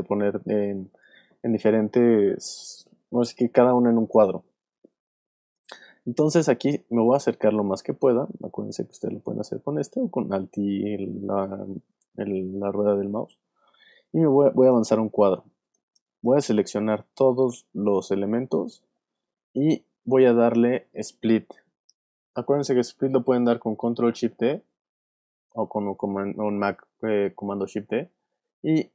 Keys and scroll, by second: 0.6 alt+space, 25.2 shift+super+d.